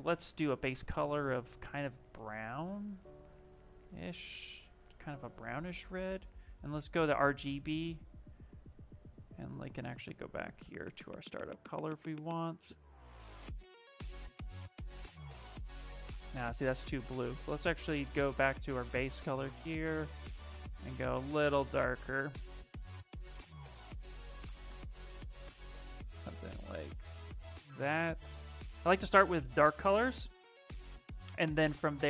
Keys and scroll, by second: 5.9 space.